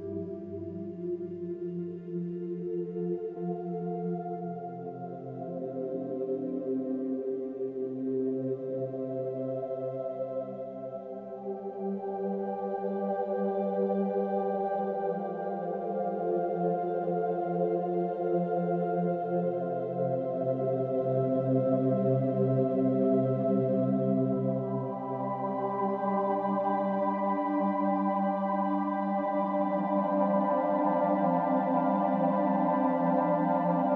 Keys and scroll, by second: 26.1 space.